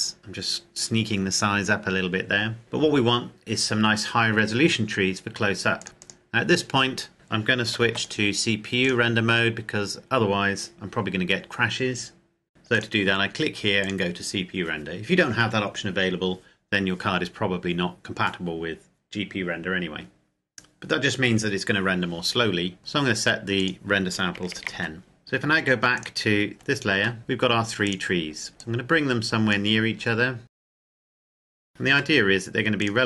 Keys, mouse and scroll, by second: 0.2 KP_7, 1.8 KP_Enter, 5.8 click, 7.9 ctrl+s, 8.1 click, 12.5 click, 22.4-22.8 scroll down 1, 22.8 click, 24.4 KP_1, 24.6 KP_0, 24.7 KP_Enter, 26.1 click, 26.5-27.3 scroll down 1, 27.9 right click, 28.7 click, 30.4 right click, 30.5-32.0 typing, 30.6 click, 32.8 click.